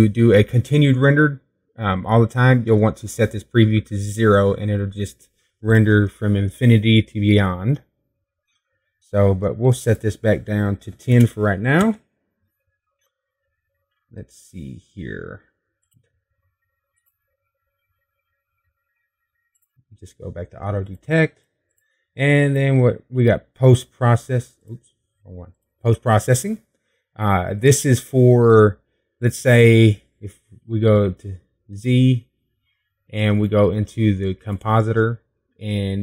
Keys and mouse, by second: 17.2-29.2 drag, 32.5 z.